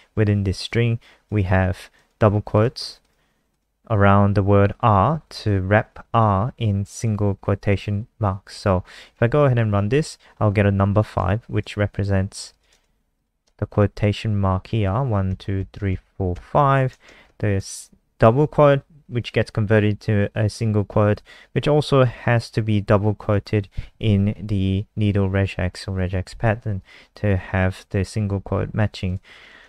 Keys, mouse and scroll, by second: 9.1 ctrl+s, 9.5 F5, 11.2 alt+click, 12.5 click, 14.1 Left, 15.3 Right, 15.5 Right, 15.9 Right, 17.0 shift+Right, 17.2 shift+Right, 29.0 click, 29.4 click.